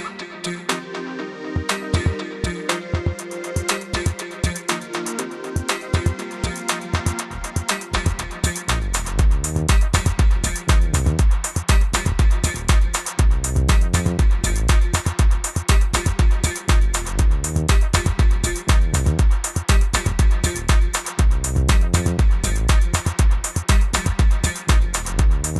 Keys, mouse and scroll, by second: 4.1 -, 7.6 click, 10.9 click, 12.0 Return, 12.3 click, 15.5 Right, 15.6 Up, 17.1 click, 17.4 click, 17.9 click, 18.7 Return, 18.9 click, 21.4 click, 22.9 space, 23.0 click, 23.3 space, 24.1 click.